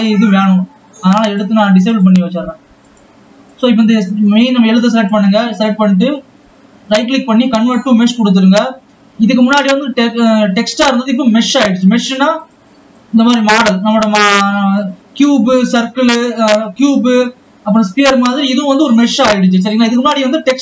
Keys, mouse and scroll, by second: 1.7 click, 2.3-3.8 drag, 5.5-8.7 right drag, 8.8-11.9 scroll up 4, 13.5 click, 13.7 click, 15.5 click, 19.3-20.5 scroll down 1, 20.5-20.6 scroll up 2.